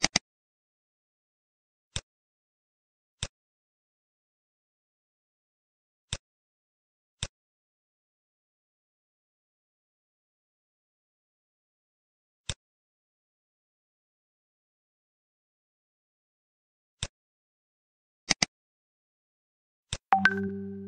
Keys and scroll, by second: 8.6 ctrl+s.